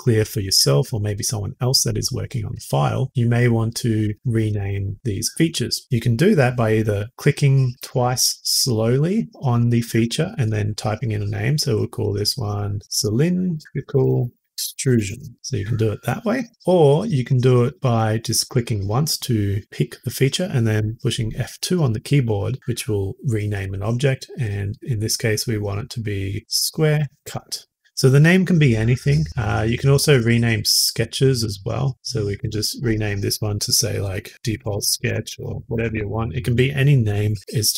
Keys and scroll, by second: 12.8-15.8 typing, 20.7 F2, 26.5-27.6 typing, 27.7 Return, 31.3 typing, 32.3 F2, 34.5-36.4 typing, 36.1 Return.